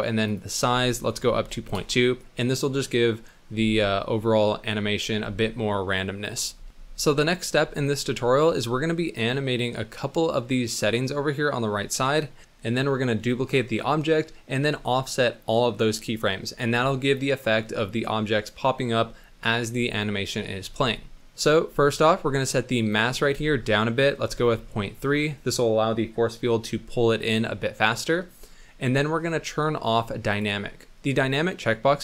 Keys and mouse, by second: 0.4-1.7 drag, 21.2 middle click, 22.8-25.0 drag, 30.2 click.